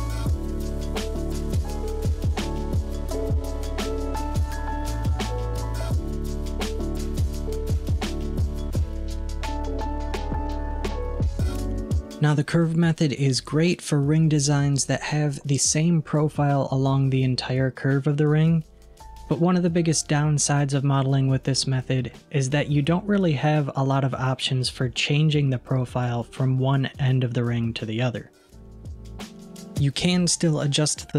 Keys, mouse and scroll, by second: 5.4 alt+z, 6.3-7.5 middle drag, 7.5-8.1 scroll down 3, 8.1-11.5 middle drag, 22.2-27.4 middle drag, 30.4 click.